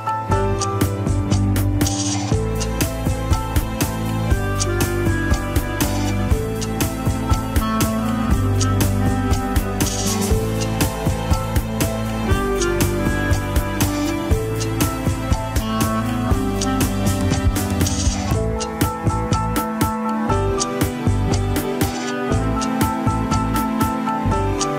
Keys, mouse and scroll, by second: 6.4-6.7 drag, 6.9-7.4 scroll up 1, 7.4 ctrl+Tab, 7.8 click, 8.5 alt+z, 8.6 r, 11.5 scroll down 5, 11.8 r, 13.9 scroll up 1, 14.9-15.5 drag, 15.6 scroll down 3, 16.1 r, 18.7 click, 19.5-20.1 drag, 20.6 r, 23.6-23.9 scroll up 2, 23.9 shift+middle click, 24.1 scroll up 1.